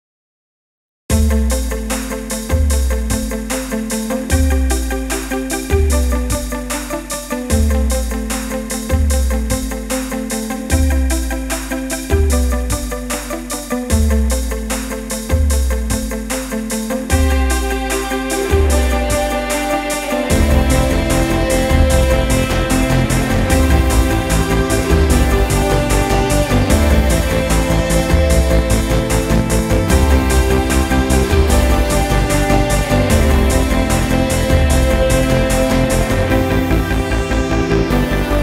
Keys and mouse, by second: 2.2-15.6 ctrl+middle drag, 15.6 click, 20.4-24.3 ctrl+middle drag, 24.3 shift+a, 37.3-38.4 middle drag.